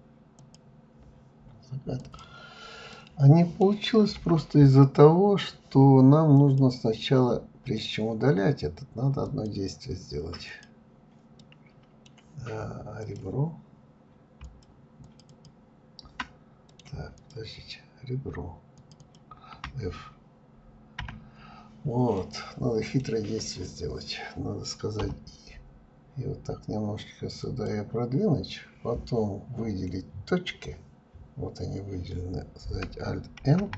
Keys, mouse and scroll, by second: 1.0 scroll down 4, 1.8-4.8 middle drag, 5.2 click, 6.6 drag, 8.1 click, 9.3 click, 10.2-11.9 middle drag, 11.9 click, 13.3 shift+click, 13.9 shift+click, 14.1 shift+click, 15.4 middle click, 16.0 click, 17.5 shift+click, 17.8 shift+click, 21.0-23.8 middle drag, 29.1 click.